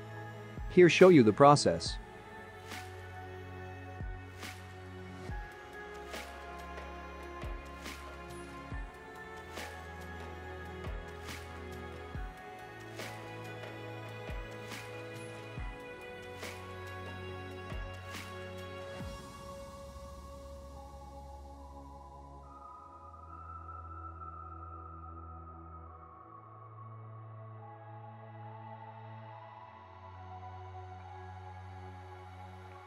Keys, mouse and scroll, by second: 0.1 Escape, 0.5 click, 0.7-1.3 scroll up 3, 1.3 s, 1.7 click, 2.2 g, 2.7 click, 2.9 r, 3.9 click, 4.4 g, 5.4 click, 6.1 middle click, 10.1 scroll down 3, 10.3 shift+middle click, 12.4 shift+d, 12.6 middle click, 13.6 ctrl+click, 14.0-15.0 typing, 14.6 KP_Enter, 14.9 scroll up 1, 15.1 middle click, 16.1 ctrl+click, 16.4 middle click, 18.2 click, 18.4 middle click, 21.8 click, 22.3 click, 22.8 click, 23.0 click, 24.0 h, 24.8 ctrl+z, 25.3 g, 25.6 Escape, 25.6 `, 26.4 shift+click, 27.2 ctrl+Tab, 27.7 click, 28.7 click, 30.6 ctrl+Tab, 31.0 click, 31.2 click, 32.3 shift+click, 32.8 ctrl+Tab.